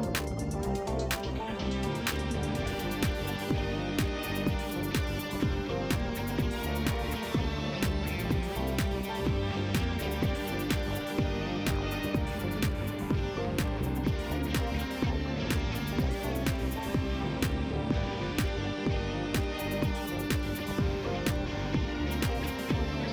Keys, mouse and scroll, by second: 2.1 click, 4.8 click, 5.1 click, 6.0-6.9 typing, 10.0 click, 11.5 click, 13.4 click, 20.5 click, 21.2-22.0 typing, 22.0 Return.